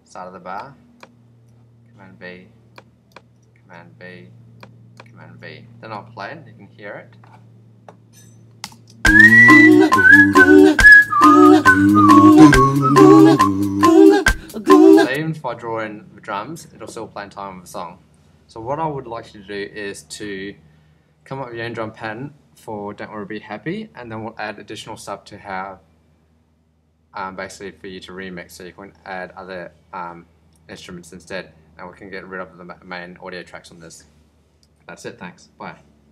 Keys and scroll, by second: 1.2 super+v, 3.5 super+v, 5.1 super+v, 8.6 Return, 8.8 space, 14.7 space.